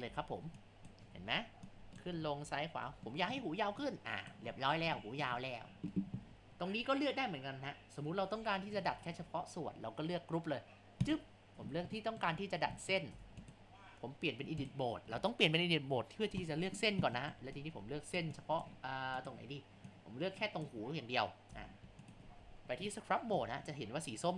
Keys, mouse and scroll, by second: 0.2 ctrl+z, 0.8 click, 1.3 ctrl+z, 1.7 click, 2.5 ctrl+z, 3.1-3.9 shift+middle drag, 3.9 click, 4.6-5.0 scroll down 1, 5.0-6.3 shift+middle drag, 6.3 ctrl+z, 11.0 click, 12.0 shift+middle click, 12.5 scroll up 1, 12.8 shift+middle click, 13.2 Tab, 14.6 click, 17.2 shift+middle click, 17.6 click, 18.4 click, 19.2 click, 21.5 Tab, 22.5 shift+scroll down 2, 22.9-23.7 shift+middle drag, 23.7 scroll up 2, 24.1 scroll down 5.